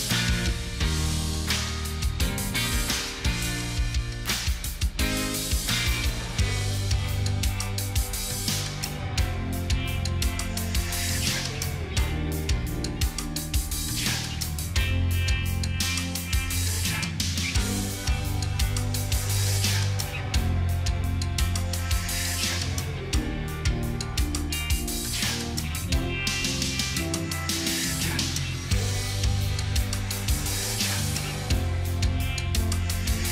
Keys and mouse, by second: 1.7 shift+click, 2.6 shift+click, 2.7 ctrl+g, 3.6 ctrl+click, 6.3 ctrl+t, 7.6 alt+click, 22.1 v, 23.0 i, 23.3 t, 23.5 o, 25.0 r, 26.2 space, 27.3 g, 28.9 ctrl+a, 32.6 3.